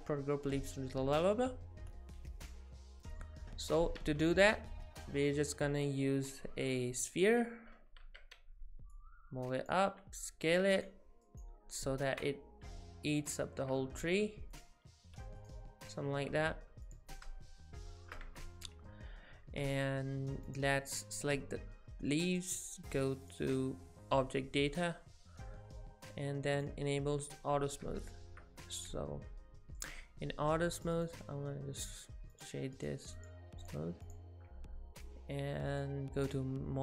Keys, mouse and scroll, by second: 2.9 click, 2.9 shift+middle click, 4.0 shift+a, 8.0 Tab, 8.9 click, 9.8 s, 11.3 right click, 12.0 ctrl+z, 12.7 s, 13.6 z, 14.1 s, 15.0 g, 17.1 middle click, 18.3 Tab, 20.5 click, 22.3 click, 26.6 click, 27.8 middle click, 28.9 middle click, 30.8 click, 31.0 right click, 32.3 click, 32.8 right click, 33.6 click, 34.1 click, 35.7 click.